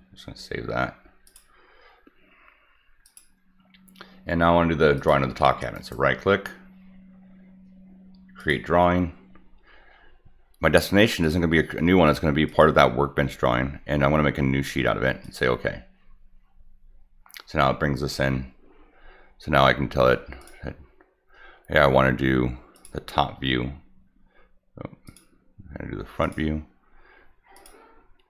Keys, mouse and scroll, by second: 1.2 click, 3.0 click, 4.9 click, 5.7 right click, 8.4 click, 11.1 click, 12.5 click, 15.2 click, 20.4 click, 22.7 click, 25.0 click, 26.2 click, 27.5 click.